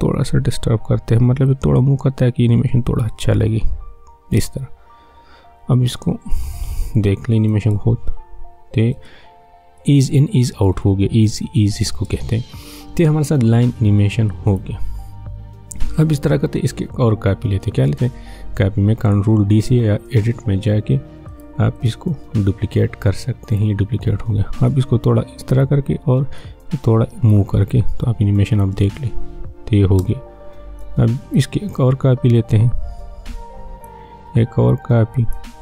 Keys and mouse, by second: 1.4-7.6 drag, 7.6 space, 9.8 click, 10.7 space, 14.5 click, 21.3-28.7 drag, 28.7 space, 30.8 click, 31.9 ctrl+d, 32.4-34.3 drag, 34.3 ctrl+d, 34.7 click.